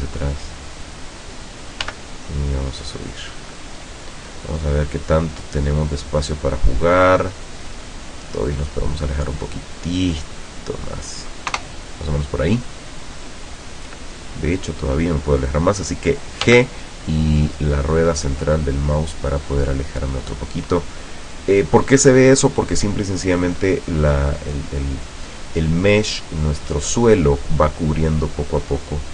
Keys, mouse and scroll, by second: 1.3 click, 1.9 g, 3.6 click, 4.2 scroll down 2, 5.1-5.4 scroll down 2, 5.4-6.0 middle drag, 6.0 scroll down 2, 6.6-7.7 middle drag, 8.4-11.2 drag, 11.6 KP_0, 13.2 scroll down 2, 13.6 scroll up 2, 14.5 scroll down 2, 16.5 g, 17.3 middle click, 20.2 click.